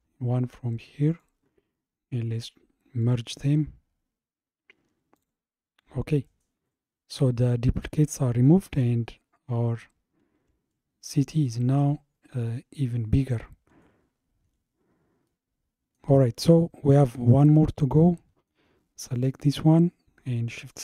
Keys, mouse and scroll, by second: 1.1-4.2 drag, 5.2 click, 9.5 scroll up 2, 10.7-13.7 shift+middle drag, 14.1-14.5 scroll down 3, 15.3-19.2 middle drag, 19.2 click, 20.7 shift+click.